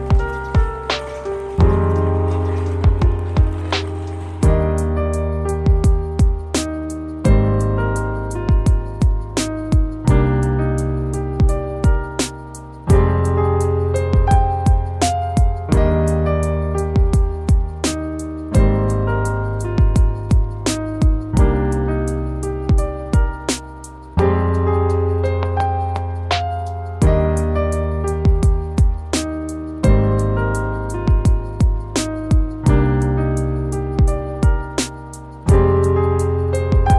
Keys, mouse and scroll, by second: 1.8 scroll down 1, 5.0 middle click, 8.1 middle click, 9.4-10.1 scroll up 1, 13.8 middle click, 18.4 scroll down 1, 22.4 scroll down 1, 23.3 middle click, 26.0 scroll up 1, 27.6-28.0 scroll up 1, 29.3-29.9 scroll up 2, 31.2 shift+a.